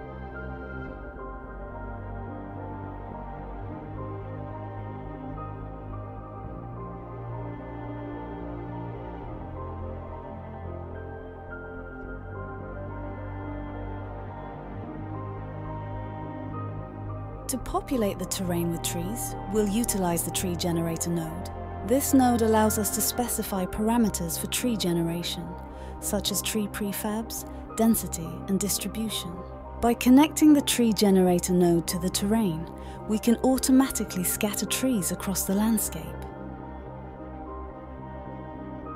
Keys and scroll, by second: 16.1-16.9 typing, 20.2-21.0 typing, 22.2 typing, 26.1-27.8 typing, 29.5-31.6 typing, 35.5-36.8 typing, 38.0 typing.